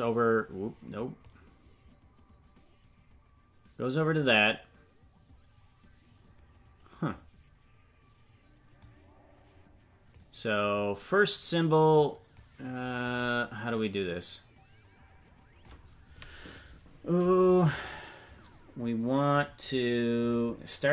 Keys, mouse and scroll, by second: 4.2-7.1 drag, 8.8-10.3 drag, 12.0-13.1 drag, 14.0-15.7 drag, 19.3-20.3 drag.